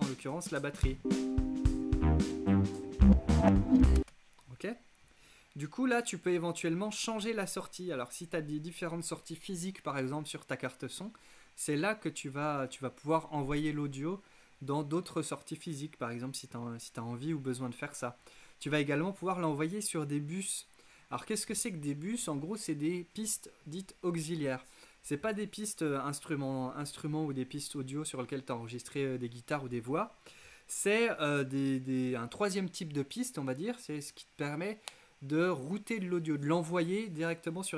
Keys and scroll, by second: 4.0 space.